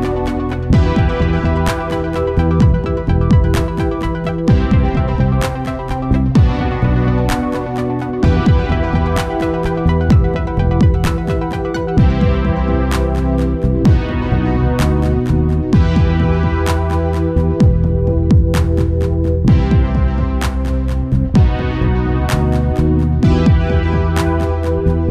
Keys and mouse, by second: 0.8 KP_7, 2.8 click, 3.8 shift+a, 7.2-8.4 drag, 8.4 shift+d, 12.5-15.9 drag, 17.7 Tab, 19.5-21.2 drag, 22.7-23.7 right drag, 23.3 g, 23.7 click.